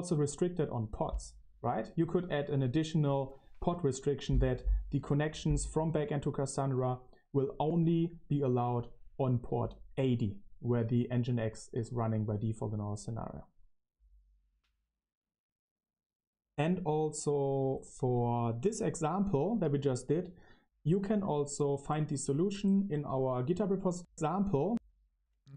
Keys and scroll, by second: 23.9 Left, 24.6 Left.